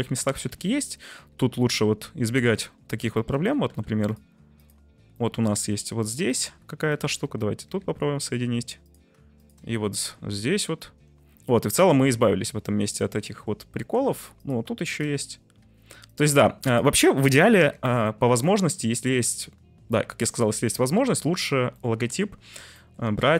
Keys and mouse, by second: 3.2 middle click, 3.7 1, 4.5 click, 5.2 middle click, 5.7 1, 6.3 click, 7.9 j, 10.4 j, 10.9 Tab, 11.8 middle click, 12.3-13.5 middle drag, 13.8 Tab, 14.0 1, 14.4 click, 14.9 shift+click, 15.8 j, 16.1 click, 17.8 j, 20.0 Tab, 21.0 ctrl+s, 21.8 middle click, 22.7 shift+middle drag, 23.2 Tab.